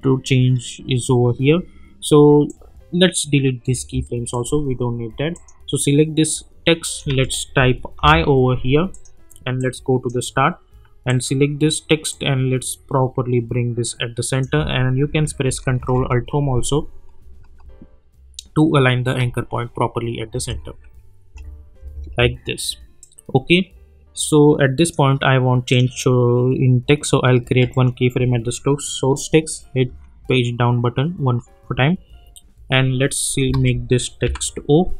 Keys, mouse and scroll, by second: 2.4-3.4 drag, 7.2 ctrl+a, 8.0 i, 8.9-10.2 drag, 15.7 ctrl+alt+Home, 20.3 space, 23.0-25.2 drag, 29.9 Page_Down, 33.2 click, 33.6 ctrl+a, 34.2 o.